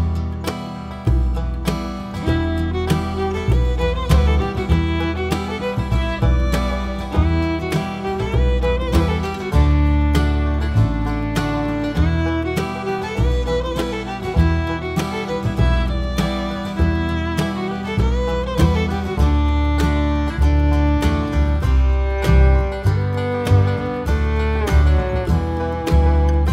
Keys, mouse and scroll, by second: 0.0 click, 0.5 click, 2.3-3.3 scroll up 1, 3.7 click, 4.2-4.8 scroll up 1, 4.8 `, 5.2 scroll down 1, 5.3 `, 6.3-14.9 drag, 12.1 `, 18.0 `, 20.3-22.8 drag, 23.1-25.0 drag, 23.5 scroll down 2, 25.9 click.